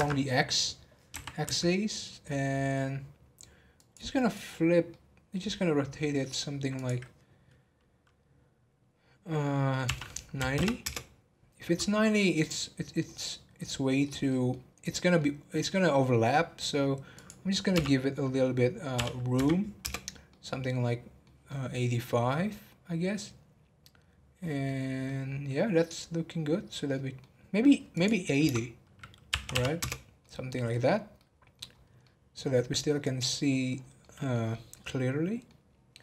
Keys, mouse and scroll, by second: 0.5 scroll up 2, 1.1 r, 4.1-6.7 middle drag, 6.7-9.9 drag, 11.3 scroll down 2, 11.5 middle click, 11.9 scroll up 2, 12.2-14.7 middle drag, 14.7 scroll up 1, 14.9-17.1 middle drag, 17.1-20.1 drag, 20.3-24.5 middle drag, 24.7 scroll down 1, 25.0-27.9 middle drag, 27.9-30.2 drag, 30.2 middle click, 30.9 scroll up 3, 31.2 middle click, 31.7 scroll up 1, 32.0-33.7 middle drag, 33.7 scroll down 2, 34.0-36.0 middle drag.